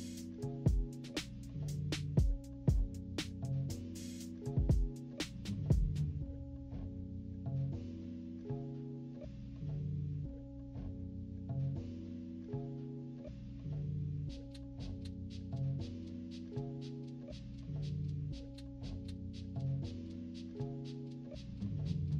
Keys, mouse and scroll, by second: 0.1 click, 0.7 click, 1.8 -, 2.2 click, 2.6 click, 2.7 scroll up 1, 2.7 =, 2.8 scroll down 1, 3.0 click, 3.3 click, 4.1 click, 4.3 click, 4.6 click, 4.8 click, 5.1 click, 6.2 -, 6.4-6.8 scroll up 2, 6.6 =, 7.0 click, 7.8 click, 8.3 click, 8.6 click, 8.8 click, 9.2 click, 9.6 click, 9.9 click, 10.4 -, 10.4 scroll down 1, 10.7 click, 10.9 =, 11.4 click, 11.8 click, 12.0 -, 12.1 =, 12.2 scroll up 2, 12.5 click, 13.0 click, 13.7 z, 13.9 click, 14.0-15.2 drag, 15.4 click, 16.0 click, 16.6 -, 16.7-17.0 scroll down 4, 16.8 =, 17.1 click, 17.7 click, 17.9 click, 18.4 -, 18.5 scroll up 1, 18.7 =, 18.9 -, 19.2 click, 19.3 scroll down 1, 19.4 =, 19.5 scroll up 2, 19.9 click, 20.4 z, 20.5 click, 20.8 click, 21.1 click, 21.5 scroll up 2, 21.7 click, 21.8 right click.